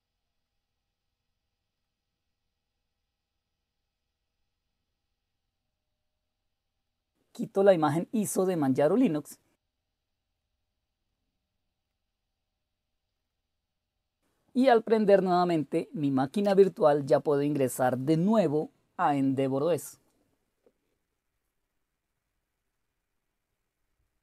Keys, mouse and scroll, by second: 0.3 click, 1.7 click, 6.8 click, 9.3 click, 10.4 click, 11.1 click, 11.9 click, 13.1 click, 16.4 Return.